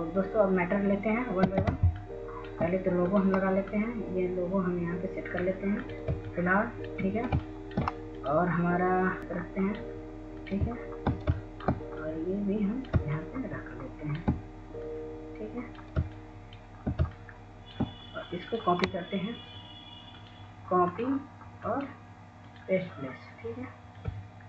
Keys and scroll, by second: 4.2-5.3 w, 5.5 w.